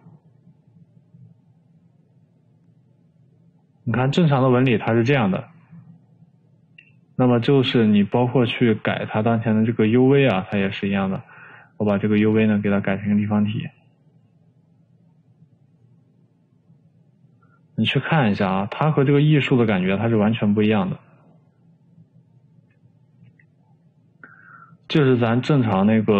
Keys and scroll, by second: 23.9 Escape.